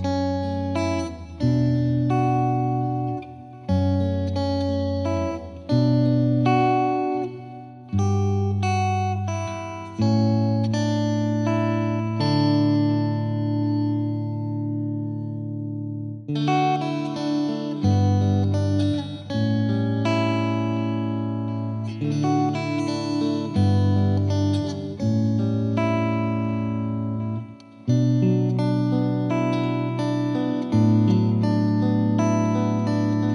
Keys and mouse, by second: 0.5 click, 1.7 click, 5.2 click, 14.6 right click, 14.7 click, 26.4 right click, 26.5 click.